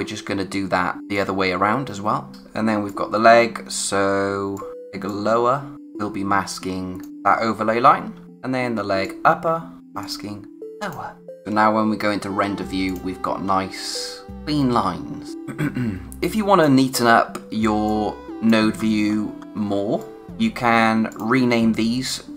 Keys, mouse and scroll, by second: 1.1 click, 2.3 scroll up 1, 2.6 space, 2.8 click, 3.1 space, 4.0-4.4 scroll down 1, 4.4 space, 4.5 click, 4.7-5.0 scroll up 1, 5.0 click, 5.4 space, 7.1-7.6 scroll up 1, 8.1 space, 9.0 click, 9.5 space, 9.8 click, 10.6 space, 11.3 click, 13.4-14.6 scroll up 1, 15.3-16.3 scroll down 1, 16.3 click, 16.8-17.5 scroll down 1, 17.5 space, 17.8 click, 18.0 space, 18.7-19.6 scroll up 1, 19.6 space, 20.0 click, 20.1 space, 20.2 click, 20.3-21.1 scroll up 1, 21.1 click.